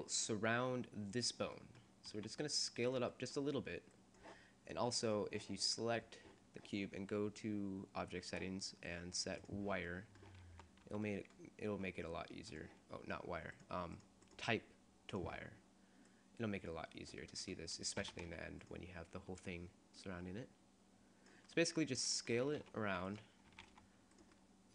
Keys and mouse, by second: 0.1-1.1 drag, 1.1 middle click, 2.2 s, 6.8 click, 7.0-9.4 middle drag, 9.4-10.6 drag, 10.6 z, 11.0 z, 11.8 s, 12.6-14.3 drag, 13.7 right click, 16.1 click, 16.3-17.5 middle drag, 18.1 s, 21.3 click, 22.5 s, 23.7 s, 24.5-24.7 drag.